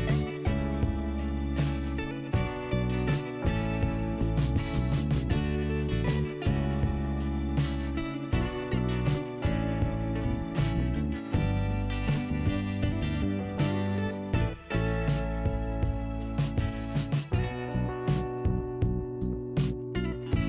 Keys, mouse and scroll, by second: 1.2 scroll up 1, 2.1 click, 3.1 click, 3.6 scroll up 1, 4.7 click, 8.3 click, 9.6 right click, 10.3 click, 11.9 click, 13.2 click, 13.3 click, 14.2 click, 16.3 click, 16.4 click, 16.8 click, 16.8 double click, 18.0 double click, 20.2 click.